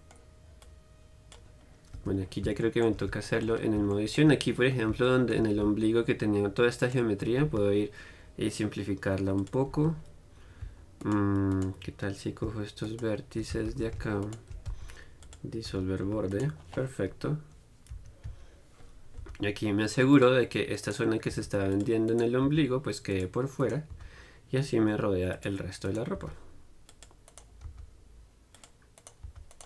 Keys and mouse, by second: 2.2 Tab, 2.5-9.7 middle drag, 10.0 z, 10.2-11.2 middle drag, 11.2-18.5 right drag, 14.9 x, 15.9 z, 16.3 z, 17.4 KP_Decimal, 18.5 KP_3, 19.4 g, 20.5 click, 21.1-24.2 middle drag, 21.6 g, 22.7 g, 24.2 g, 25.5 click, 26.4 g, 27.9 right click, 29.5 g.